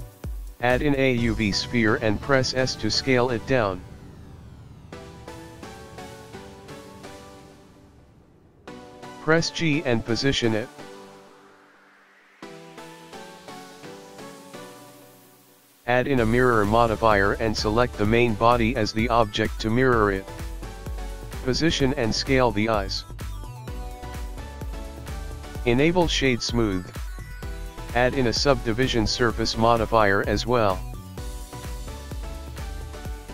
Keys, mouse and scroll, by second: 1.1 shift+a, 3.5 click, 4.6 click, 5.5 middle click, 6.8 s, 8.1 KP_1, 8.5 g, 10.9-11.5 scroll down 2, 11.6 shift+middle click, 12.5 g, 13.8 g, 15.6 click, 19.8 click, 21.8-24.4 typing, 24.9 click, 25.1 ctrl+z, 25.1 click, 25.7 right click, 29.0 click, 31.0-31.4 scroll up 5, 31.9 scroll down 3, 32.6 click, 33.2 middle click.